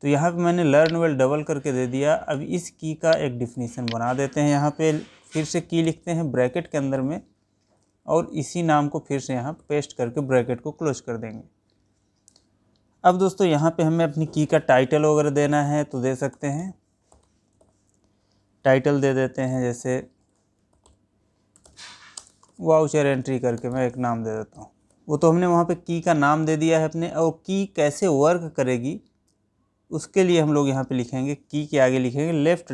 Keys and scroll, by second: 1.2 ctrl+c, 8.2 ctrl+v, 22.6 space.